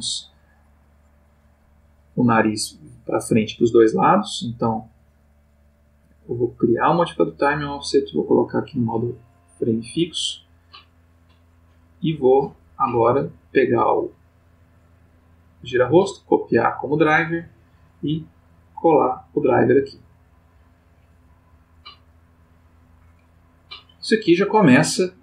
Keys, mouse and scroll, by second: 5.1 click, 6.7 click, 7.8 click, 8.5 click, 9.3 right click, 11.8 click, 13.7 click, 15.2 right click, 15.7 click, 17.1 click, 18.7 right click, 20.2 click, 22.3 click, 23.5-25.2 drag.